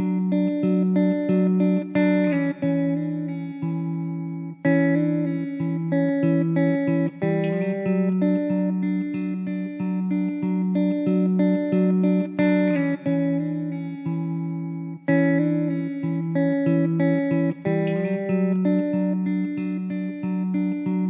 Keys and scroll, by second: 12.3 s, 17.2 Tab, 17.7 ctrl+r, 19.0 ctrl+r, 20.0 3.